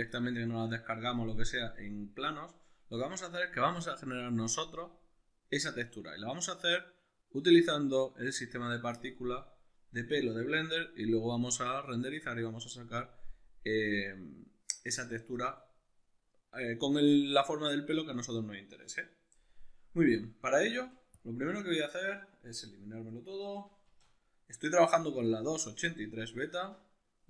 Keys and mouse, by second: 9.2-27.2 middle drag, 20.6 a, 23.8 shift+a.